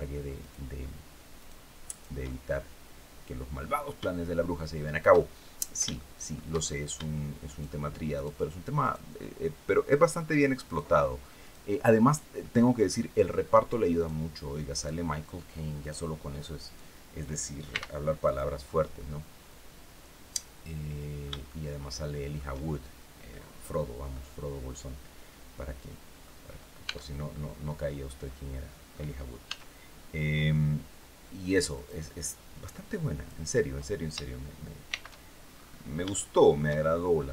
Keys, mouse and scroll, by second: 0.1 shift+right click, 1.1 shift+right click, 1.6 shift+right click, 1.9-4.2 shift+middle drag, 4.3 shift+middle click, 5.3 shift+middle click, 6.3 shift+scroll up 1, 7.1 shift+right click, 7.8 shift+right click, 8.5 shift+right click, 8.9 shift+middle click, 10.3 shift+right click, 11.1 shift+right click, 11.7 shift+right click, 12.1 shift+middle click, 13.6 shift+right click, 14.4 shift+right click, 15.5 shift+right click, 16.3 shift+right click, 17.4 shift+x, 17.9 click, 18.3 scroll down 2, 18.6-21.1 middle drag, 22.5 shift+scroll down 2, 23.0 click, 23.8-26.1 drag, 26.6 Tab, 27.0-28.8 drag, 29.1 s, 31.4 click, 32.4 click, 34.6 shift+c, 35.1-35.6 shift+scroll up 3, 35.8 shift+middle click, 36.5-36.9 shift+scroll up 3.